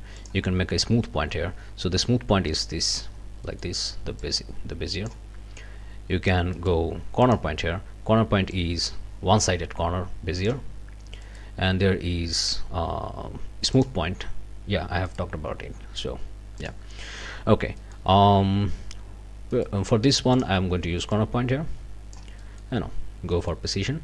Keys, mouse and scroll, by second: 0.2 click, 2.0-3.1 drag, 3.1 scroll down 1, 3.4 click, 3.7 click, 4.2-5.3 drag, 5.3 scroll up 1, 6.6 right click, 7.2 click, 7.7 scroll down 1, 8.5-10.7 drag, 11.2 right click, 13.7 click, 15.1 right click, 16.6 click, 17.0 middle click, 17.8 click, 19.5 right click, 20.3 click, 21.1-22.3 drag, 22.4 click, 23.3 click, 23.9 middle click.